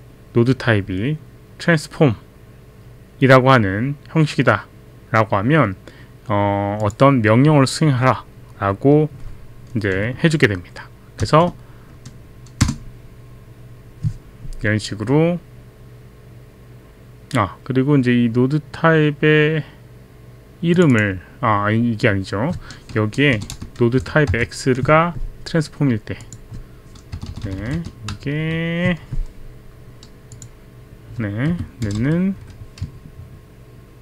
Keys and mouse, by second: 6.8 click, 12.6 Return, 20.7 click, 23.4 BackSpace, 23.6 BackSpace, 24.0 Delete, 24.3 x, 26.2 click, 27.1 BackSpace, 27.3 BackSpace, 27.6 BackSpace, 28.2 Down, 28.2 Up, 28.2 BackSpace, 30.4 click, 31.5 space, 32.4 space.